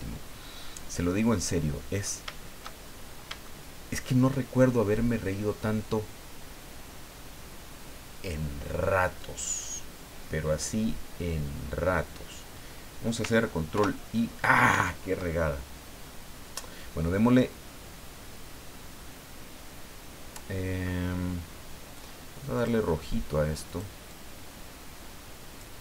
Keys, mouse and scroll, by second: 2.8-3.2 shift+scroll down 3, 3.4 shift+middle click, 13.7 ctrl+i, 14.7 ctrl+z, 22.6 click, 23.7 click, 24.1-25.8 drag.